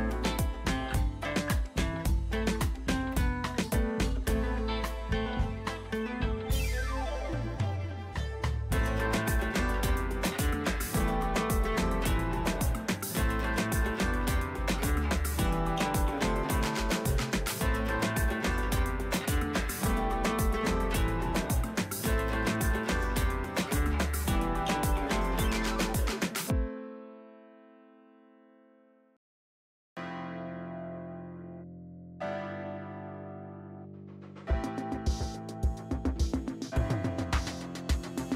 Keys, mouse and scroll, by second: 23.2 ctrl+l, 25.1-26.4 drag, 26.4 scroll down 1, 26.6-28.2 scroll up 1, 28.2 click, 30.2-32.6 scroll up 1, 32.6-35.2 drag, 36.8 ctrl+m.